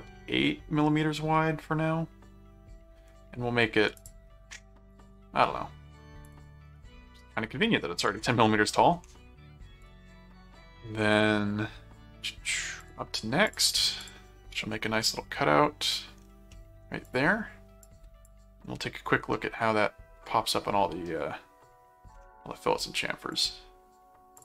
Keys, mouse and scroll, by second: 4.0 shift+click, 4.9 shift+click, 6.3 click, 9.8 click, 12.8 click, 13.5 click, 15.0 middle click, 16.5 middle click, 17.0 click, 17.8 click, 19.3-22.1 middle drag, 23.3 click, 24.3 click.